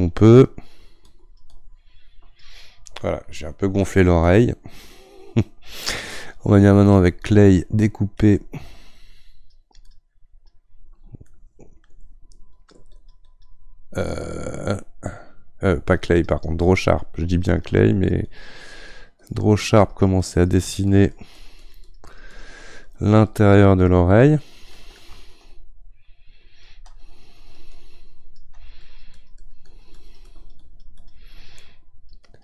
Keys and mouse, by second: 4.2-6.9 middle drag, 6.9-8.9 drag, 8.9-10.3 right drag, 10.3-11.3 drag, 11.3-12.5 middle drag, 12.5-32.4 drag.